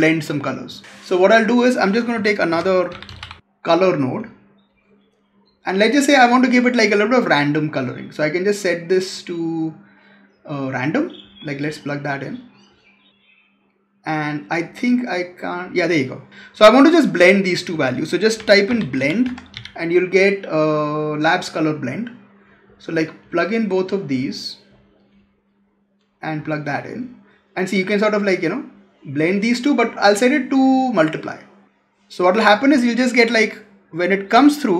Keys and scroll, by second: 2.0 Tab, 17.6 Tab.